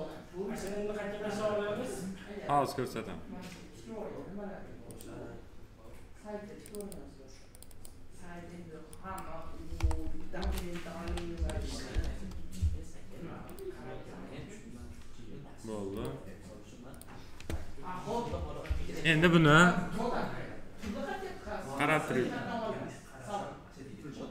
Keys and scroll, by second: 9.7 BackSpace, 10.3 shift+m, 11.0 e.